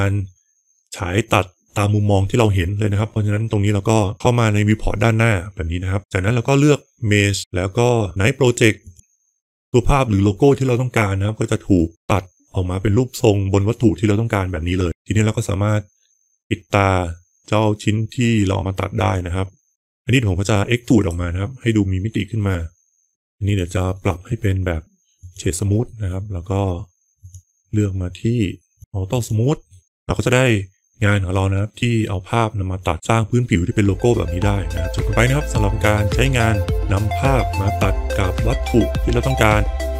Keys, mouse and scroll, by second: 7.3-8.9 drag, 8.9-14.5 middle drag, 18.9 click, 20.9 e, 23.1 alt+v, 23.1 middle click, 23.3 click, 23.8-25.2 right drag, 25.7 middle click, 27.0 click, 28.7 click, 29.0 click, 29.5 middle drag.